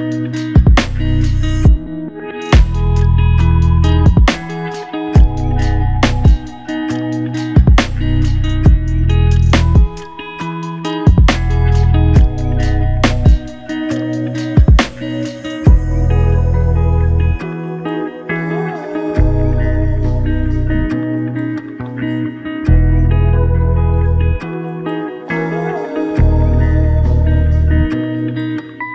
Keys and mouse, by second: 0.3 ctrl+click, 3.7 typing, 5.2 typing, 6.7 shift+click, 9.2 alt+shift+click, 14.5 shift+click, 16.5 alt+shift+click, 18.8 ctrl+click, 24.0 shift+click, 25.6 ctrl+click, 27.3 double click.